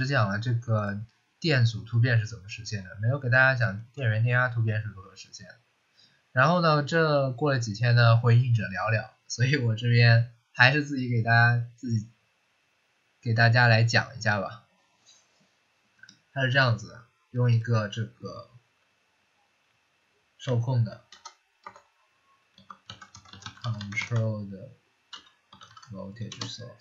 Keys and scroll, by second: 20.3 v, 21.5-26.1 typing, 26.2 Return.